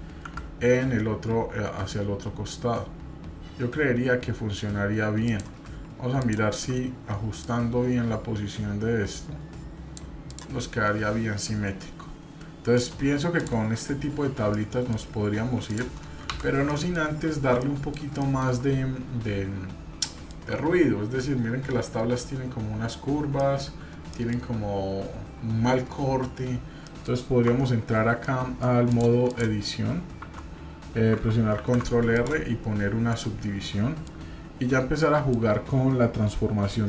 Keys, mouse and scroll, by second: 6.2 shift+click, 7.4-10.0 drag, 10.3 click, 10.8-11.4 scroll down 1, 12.7 click, 13.3 click, 14.5 middle click, 15.1-15.6 scroll up 2, 15.6 click, 16.3 Delete, 16.7 middle click, 17.0 scroll up 1, 17.6 middle click, 18.2 shift+middle click, 19.5-20.4 scroll up 3, 20.1 shift+middle click, 23.4 shift+middle drag, 24.0-24.4 shift+middle drag, 26.8 middle click, 27.4 Tab, 28.2 middle click, 28.9 click, 29.3 click, 30.2 Tab, 31.5 ctrl+r, 33.6 middle click, 35.0 middle click.